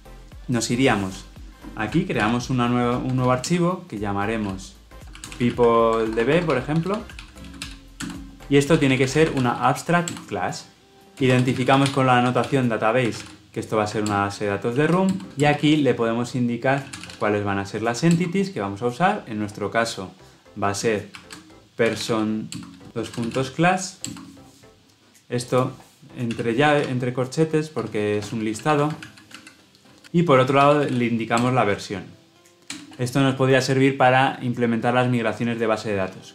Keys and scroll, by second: 2.2 alt+Insert, 10.0 Return, 14.0 alt+Return, 15.2 ctrl+z, 18.0 Return, 22.5 Return, 31.3 Return.